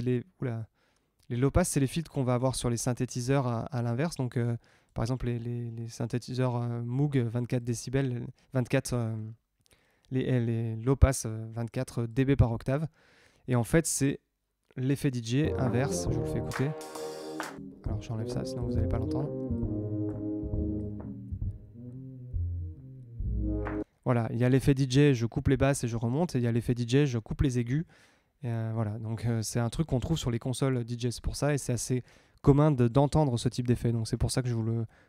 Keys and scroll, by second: 15.4 space, 23.8 space.